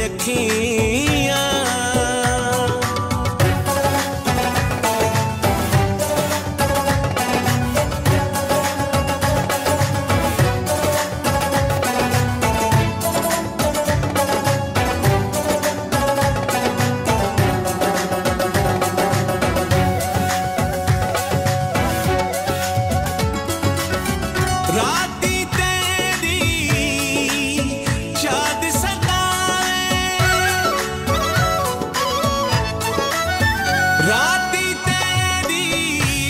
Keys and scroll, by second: 3.4 ctrl+s, 3.9 F4, 5.2 ctrl+s, 5.5 ctrl+e, 6.2 Return, 18.5 BackSpace, 20.0-20.9 typing, 22.3 ctrl+z, 23.3 space, 24.8 i, 25.7 r, 27.4 n, 29.4 ctrl+s, 30.9 Left, 32.5 Up, 33.6 Right, 34.7 ctrl+s.